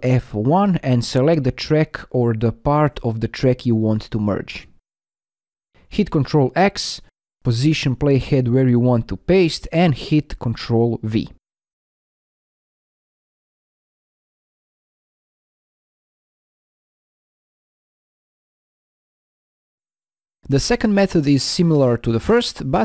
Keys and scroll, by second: 5.5 ctrl+x, 10.4 ctrl+v.